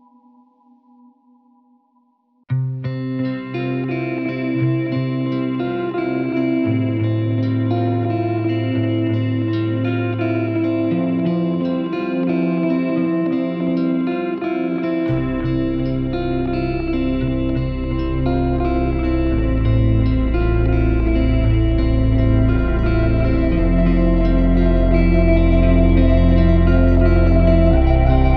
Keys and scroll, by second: 10.5 `, 27.4 g.